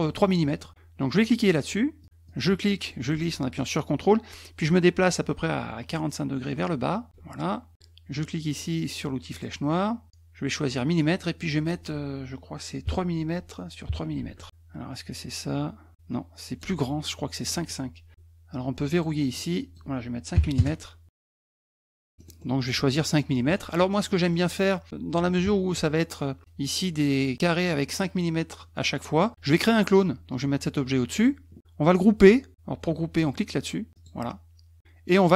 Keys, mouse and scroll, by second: 2.0 click, 2.3-7.1 drag, 9.3 click, 11.4 click, 13.3 Tab, 14.3 Tab, 14.9-16.6 drag, 17.4 click, 18.9 click, 19.3 click, 19.6 click, 21.6 click, 22.1 middle click, 22.3 middle click, 24.1 middle click, 30.0-31.2 drag, 33.9 click.